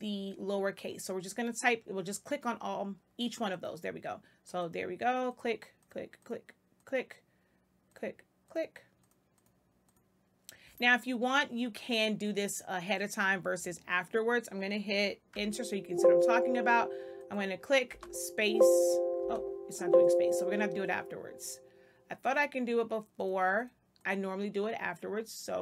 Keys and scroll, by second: 15.3 Return, 17.8 space, 19.1 space.